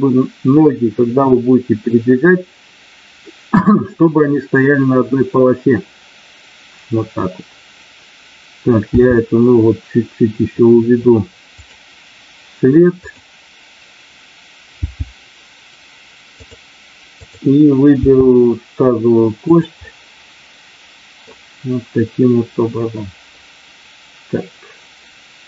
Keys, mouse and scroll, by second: 8.9 g, 11.5 click, 12.9 click, 14.8 g, 16.3 click, 17.0 click, 17.8 g, 19.4 click, 19.8-20.8 scroll up 1, 20.8 middle click.